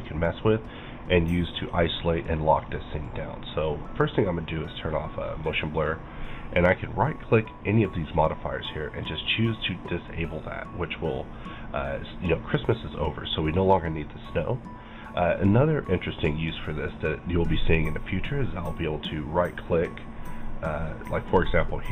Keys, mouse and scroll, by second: 4.0 click, 4.7 click, 6.7 right click, 9.5 click, 10.2-21.9 middle drag, 18.6 right click.